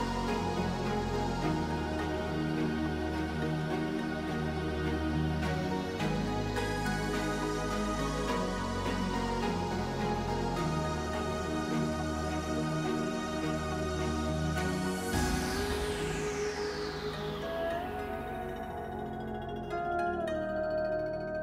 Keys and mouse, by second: 0.2 shift+click, 1.1 shift+click, 3.8 click, 4.5 shift+click, 5.0 click, 6.0 click, 9.5-10.7 drag, 11.1 shift+click, 11.4 click, 13.0 shift+click, 13.5 click, 16.0 ctrl+r, 21.2 click.